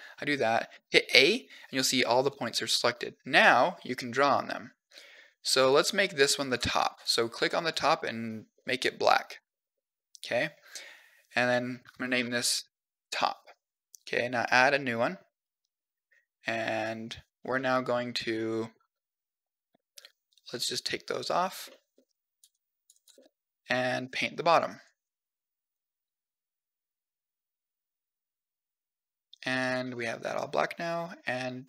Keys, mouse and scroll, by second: 0.6 a, 2.9-4.0 drag, 4.2 click, 4.8 click, 5.5 click, 6.0 click, 6.5 click, 6.8 click, 7.0 click, 7.2 click, 7.4 click, 7.5 click, 8.4 middle click, 9.3 shift+middle click, 9.8 middle click, 10.5 scroll down 1, 11.1 click, 11.2-13.5 drag, 14.5 click, 16.7 click, 17.4 middle click, 18.6 scroll down 2, 19.0-20.4 drag, 21.4 middle click, 21.9 click, 22.3 click, 22.7 click, 23.0 middle click, 24.7 click, 25.5 click, 25.9 click, 26.1 click, 29.7 middle click.